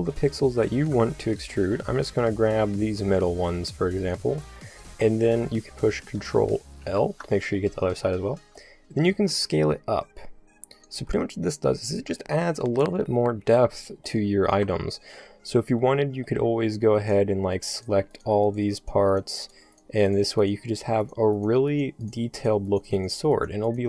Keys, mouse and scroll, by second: 0.0 middle click, 6.8 ctrl+l, 7.9-9.1 middle drag, 9.1 s, 11.0 a, 11.5 middle click, 11.6-13.4 drag, 14.6 KP_5, 15.9-17.0 middle drag, 23.4 shift+right click.